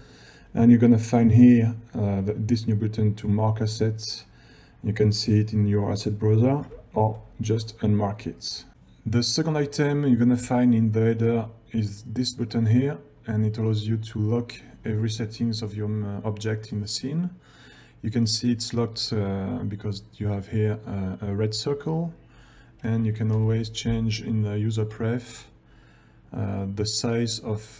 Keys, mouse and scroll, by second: 6.9 ctrl+scroll down 1, 8.7 click, 10.9-11.3 ctrl+scroll down 1, 23.5 shift+u.